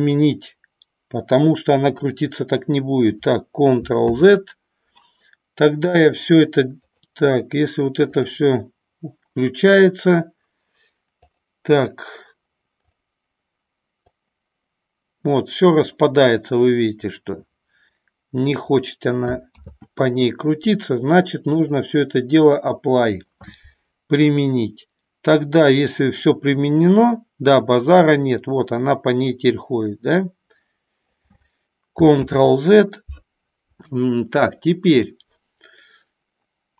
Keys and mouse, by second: 2.2 click, 4.4 ctrl+z, 7.0 click, 8.3 click, 12.9 click, 14.4-18.5 drag, 19.9 ctrl+z, 21.6-22.9 drag, 26.5-31.3 drag, 32.5 ctrl+z.